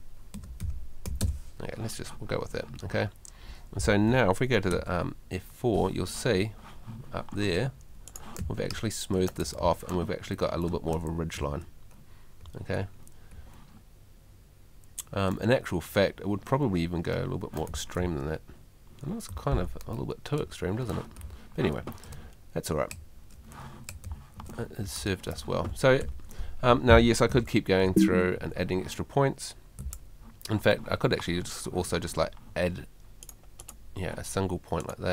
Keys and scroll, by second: 0.1-1.1 typing, 4.7 F4, 8.4 w, 15.3 w, 17.1 w, 19.3 s, 21.1 s, 23.7 s, 27.8 F2, 29.8 F2.